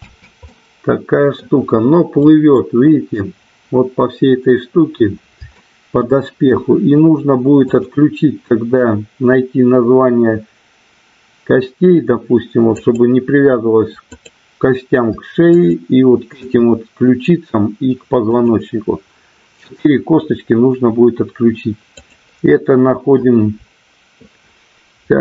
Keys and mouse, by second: 0.3 space, 2.3 middle click, 5.5-5.9 shift+middle drag, 7.8 click, 12.8 click, 14.0 click, 15.7 shift+click, 18.3 click, 21.8 click.